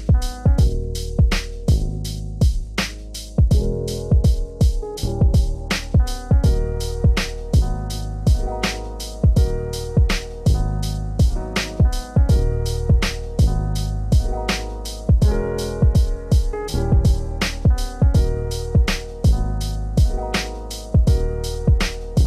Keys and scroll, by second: 9.8 ctrl+space, 18.8 ctrl+space, 19.4 ctrl+z, 21.9 ctrl+space.